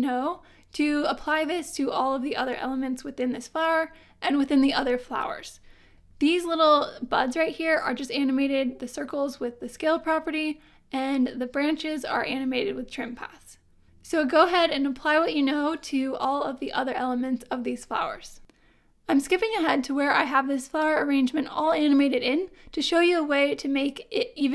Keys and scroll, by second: 20.0 space.